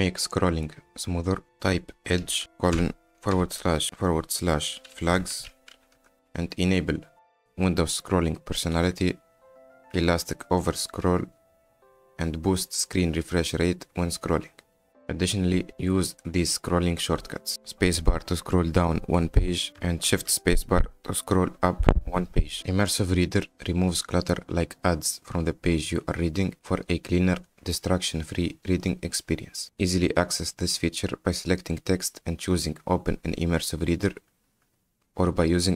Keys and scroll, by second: 2.4 e, 2.8 /, 3.4 /, 4.8-6.3 typing, 18.1 space, 21.1 shift+space.